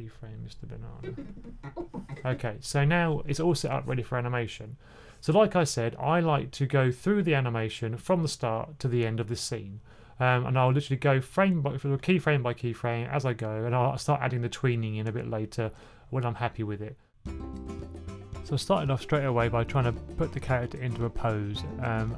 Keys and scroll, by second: 17.1-19.6 typing.